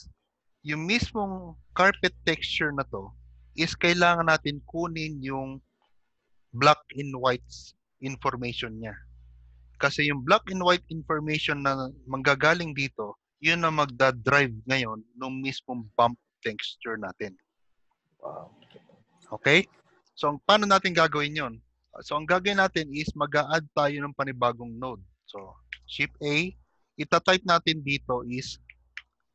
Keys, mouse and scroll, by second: 0.6-1.2 scroll up 3, 1.8 click, 2.1 g, 19.6-19.9 scroll down 1, 22.4 shift+middle click, 22.4 scroll down 6, 25.2 shift+middle click, 26.5 shift+a.